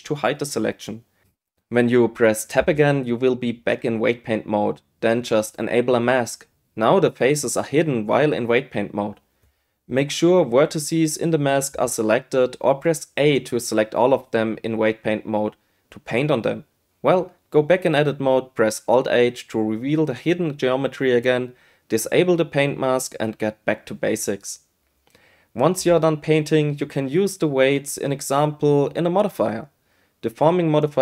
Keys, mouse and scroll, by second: 0.3 h, 1.9 Tab, 8.2 click, 10.2 a, 10.8-13.7 drag, 16.7 Tab, 18.8 alt+h, 19.9 Tab, 21.5 q, 22.4 click, 23.2 Tab, 23.4 Tab, 23.6 click, 25.0 click, 25.4-27.0 drag, 27.9 space, 29.0 space, 29.9 right click, 30.9 click.